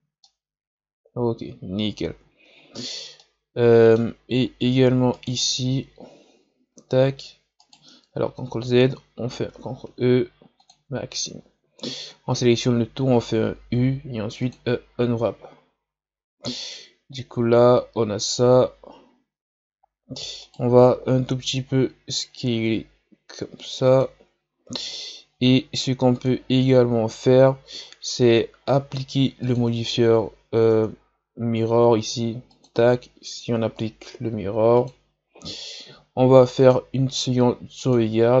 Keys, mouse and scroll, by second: 0.2-4.4 middle drag, 4.4-4.9 scroll up 1, 5.1 right click, 6.9 e, 8.2 ctrl+z, 9.8 ctrl+e, 11.4 a, 11.8 a, 13.7 u, 15.6-16.9 scroll up 2, 16.9-18.2 scroll up 1, 18.2-20.4 scroll down 1, 20.4 right click, 21.0 l, 22.1 s, 26.1-30.7 drag, 30.7 Tab, 32.5-38.4 drag.